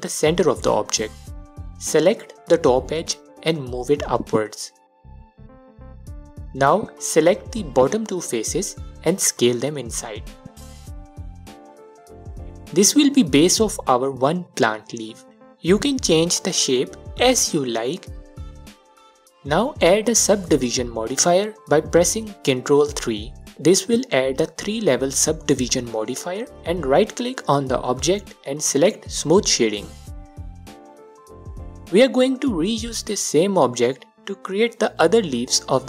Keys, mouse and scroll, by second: 0.9-2.7 drag, 3.1-4.4 alt+drag, 5.2-8.8 drag, 8.2 3, 9.3 shift+click, 9.7 s, 11.3 click, 11.5-11.9 scroll down 2, 11.9 alt+click, 12.6 scroll down 2, 12.7-13.9 middle drag, 13.3-13.9 scroll up 2, 13.9 click, 14.1 click, 15.4 2, 15.8 click, 16.0 click, 16.8-27.7 drag, 18.1 Tab, 19.7 ctrl+3, 27.7-29.1 right drag, 29.1-30.6 drag, 31.4-31.9 scroll down 2, 31.9 alt+click, 33.9 space, 35.0 click.